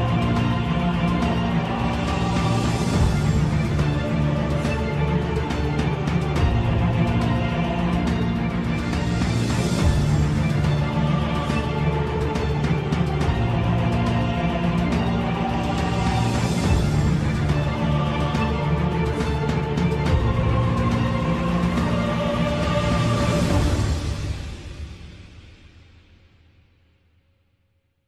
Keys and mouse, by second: 0.7 3, 2.2 a, 2.2 KP_7, 4.7 s, 8.0 shift+middle click, 9.0 middle click, 9.8 2, 11.9 alt+click, 13.2 s, 16.9 ctrl+z, 17.5 shift+middle click, 18.2 middle click, 20.7 shift+KP_7, 20.8 shift+middle click, 23.0 alt+shift+click, 25.2 s.